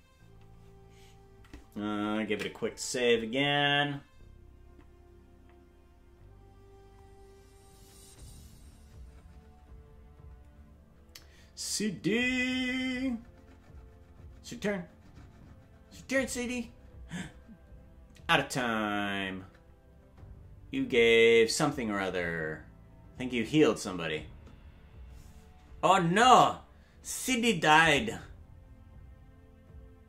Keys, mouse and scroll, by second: 4.9 ctrl+s.